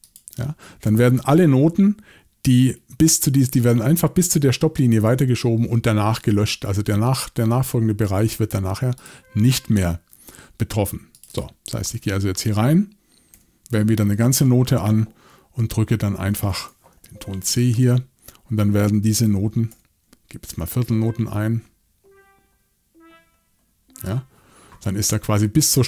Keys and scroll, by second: 13.3 8, 19.7 6.